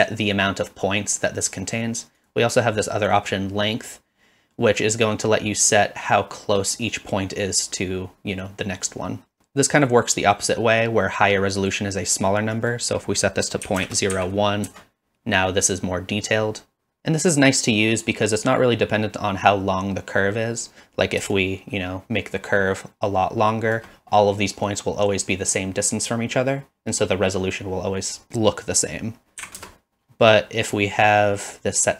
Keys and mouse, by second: 2.2-4.0 drag, 12.6-15.3 drag, 21.4-23.9 shift+drag, 29.2 click, 30.8-31.9 drag.